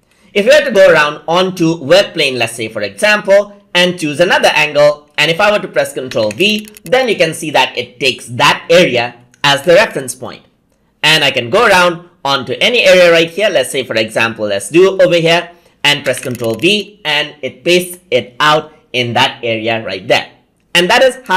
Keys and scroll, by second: 5.9 ctrl+v, 15.8 ctrl+v.